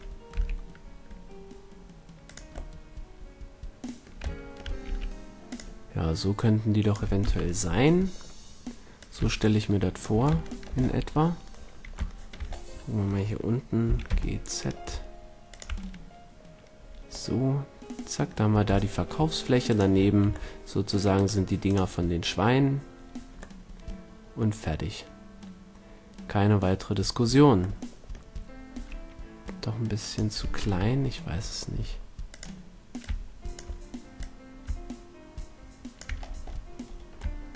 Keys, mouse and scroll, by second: 0.3 g, 2.3-4.2 drag, 4.2-5.4 middle drag, 4.8 s, 6.0-8.2 drag, 7.2 KP_1, 8.9-10.8 drag, 10.8 middle click, 12.1-14.0 middle drag, 13.8 g, 15.5-17.3 drag, 19.6-20.2 middle drag, 20.2 a, 23.2 right click, 23.5 drag, 28.7 s, 30.6 KP_1, 31.6 s, 32.9-36.0 drag, 36.1-37.5 middle drag.